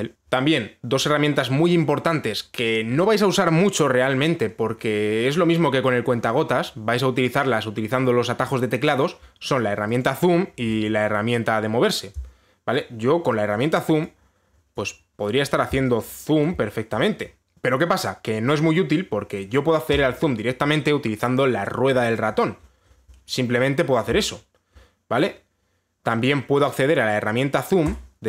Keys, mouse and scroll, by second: 10.6 click, 11.5 click, 14.2 click, 15.4 click, 17.1 alt+click, 17.4 scroll, 20.6 click, 22.4 scroll, 22.5-22.9 scroll up 5, 22.9 scroll, 23.2 scroll down 4, 23.3 scroll up 2, 23.4 scroll down 1, 23.5-25.9 scroll up 3, 26.1 scroll.